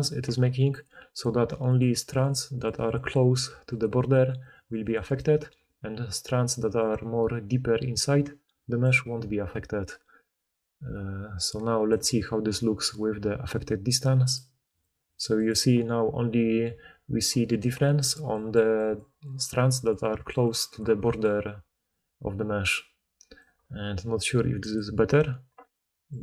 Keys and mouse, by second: 0.3-4.7 typing, 5.8-9.4 d, 6.7-15.1 drag, 6.7-14.3 middle drag, 6.7-14.3 right drag, 11.8 d, 11.9 d, 14.7 middle click, 14.7 right click, 15.1-18.2 right drag, 15.4-16.3 drag, 15.4-16.3 middle drag, 16.3-21.3 typing, 18.2 click, 20.5-26.2 drag, 20.5-24.7 middle drag, 20.5-24.7 right drag, 23.3 d.